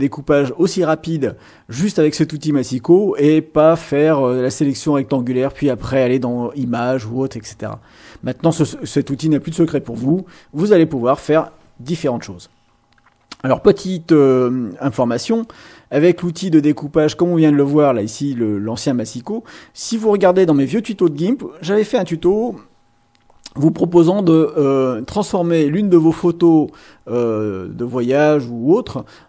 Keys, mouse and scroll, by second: 15.4 click.